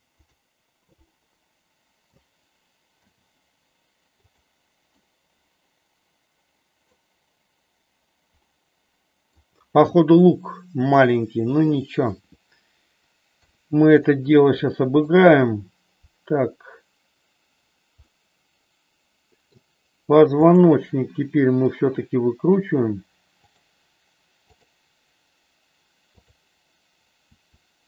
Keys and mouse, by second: 1.1-2.1 middle drag, 3.0 g, 5.0-7.0 middle drag, 8.5 middle click, 13.3 KP_3, 14.1-15.1 middle drag, 18.0-19.5 middle drag, 20.3 click, 21.8 r, 24.5 click, 27.2 r.